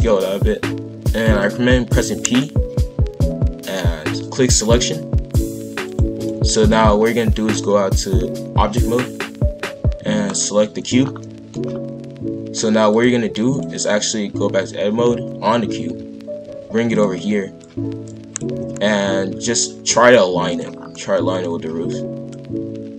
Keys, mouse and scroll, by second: 2.0 p, 5.8 click, 6.2-9.2 drag, 10.2 click, 11.0 scroll down 1, 11.2-11.6 middle drag, 11.6-12.9 scroll up 2, 12.9-15.0 drag, 15.0 a, 15.8 g, 17.6 click, 18.5 KP_5, 18.5 KP_1, 19.0 scroll up 1, 19.3 g, 20.7 scroll down 1, 20.9-22.3 middle drag, 22.3 click.